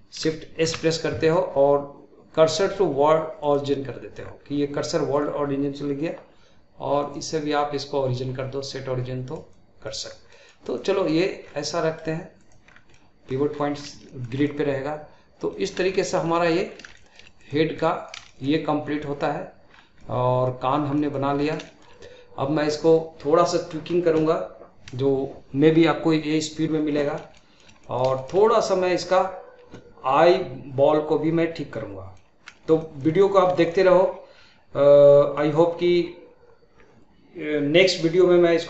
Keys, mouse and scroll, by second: 0.6 shift+s, 4.2-4.7 scroll down 2, 7.0-10.0 drag, 10.0 scroll down 1, 10.3-10.6 middle drag, 10.6 click, 11.4-11.7 scroll up 2, 11.7-12.4 middle drag, 12.4 drag, 12.6 scroll down 2, 12.9-13.5 middle drag, 13.5-14.1 scroll up 5, 14.1-15.7 shift+middle drag, 15.7 scroll up 2, 15.9-16.7 shift+middle drag, 16.7 scroll up 2, 17.0-17.4 shift+middle drag, 17.4-17.8 drag, 17.8-19.7 middle drag, 19.7 scroll down 1, 20.0 middle click, 20.7 scroll down 2, 21.0-21.3 middle drag, 21.3-21.7 scroll up 3, 21.7-24.8 shift+middle drag, 26.8 scroll down 2, 26.9-27.4 scroll up 1, 27.4-31.2 shift+middle drag, 31.7-38.5 middle drag.